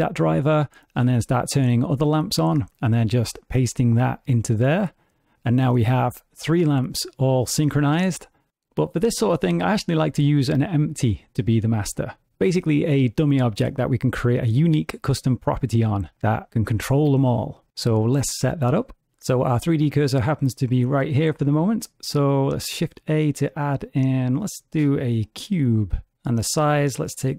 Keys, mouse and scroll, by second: 1.6 click, 2.3 click, 3.5 right click, 6.6 click, 20.8 shift+a, 26.9 click.